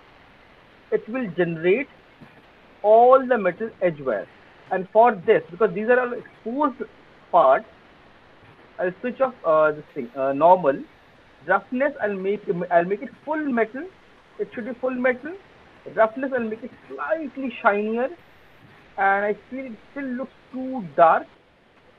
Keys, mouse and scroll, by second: 1.8 alt+click, 2.0 alt+middle click, 2.3 alt+click, 3.2 alt+middle click, 3.5 alt+right click, 3.8 alt+click, 4.6 click, 8.1 click, 11.4-13.0 scroll down 2, 14.0 click, 17.7 click, 18.5 alt+click, 19.4 click.